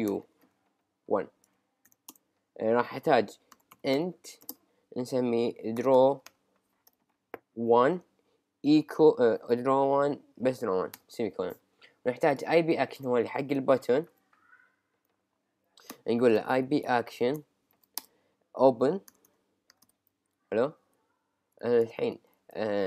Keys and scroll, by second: 2.1 Return, 5.9 d, 7.8 d, 8.0 1, 9.8 1, 10.9 ;, 13.0 Return, 16.7 Left, 18.0 Return, 20.4 Right.